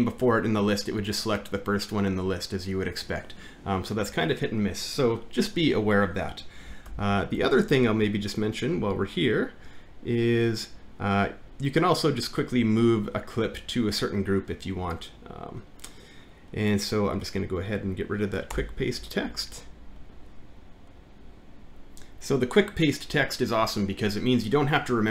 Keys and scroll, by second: 6.9 alt+`, 19.3 BackSpace, 21.6 ctrl+F9.